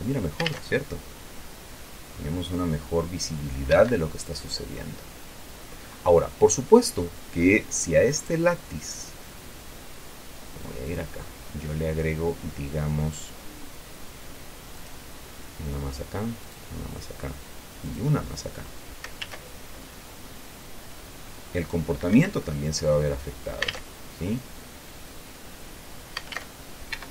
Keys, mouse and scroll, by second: 0.0 Escape, 0.8 alt+a, 4.0 Escape, 5.1-6.7 drag, 6.7 middle click, 6.9-7.4 scroll up 1, 7.4-8.4 scroll up 1, 8.4 right click, 11.2 click, 13.1-13.4 scroll down 1, 15.1 click, 16.7 click, 18.2 click, 19.5 alt+a, 22.4 Escape, 22.7-24.0 drag, 24.0 alt+a, 26.7 alt+a.